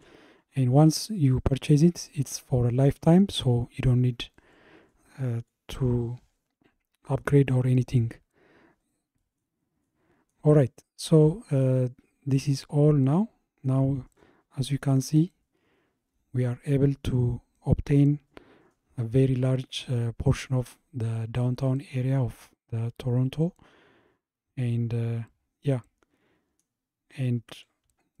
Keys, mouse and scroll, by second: 9.2-17.2 middle drag, 18.0 middle click, 22.6 middle click, 24.3 middle click, 27.1-27.7 scroll up 1, 27.7-28.2 scroll up 1.